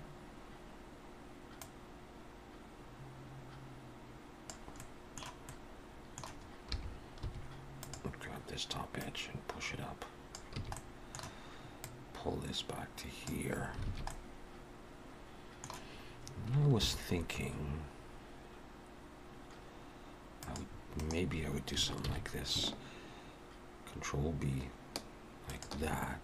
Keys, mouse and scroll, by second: 1.6 click, 4.5 click, 4.8 middle click, 5.4 middle click, 6.6 3, 7.2 2, 7.7 click, 9.0 click, 10.5 a, 10.7 middle click, 11.8 click, 13.8 alt+a, 14.1 middle click, 16.6 ctrl+r, 22.0 ctrl+b.